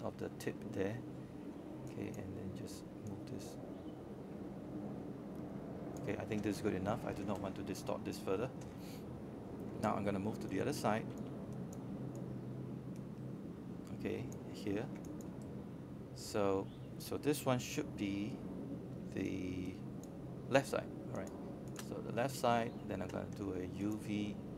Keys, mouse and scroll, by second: 1.8-2.2 scroll down 1, 2.2 scroll up 1, 3.0-16.5 drag, 16.5-17.7 scroll up 1, 17.7 alt+middle click, 18.2 scroll up 1, 18.7 alt+middle click, 19.9-22.6 drag, 23.8 z.